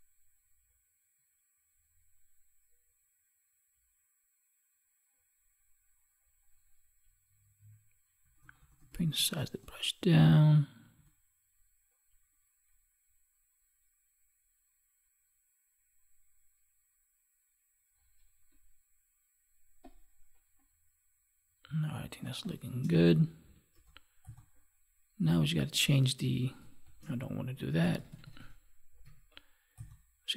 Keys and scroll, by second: 21.9 space, 26.8 ctrl+z.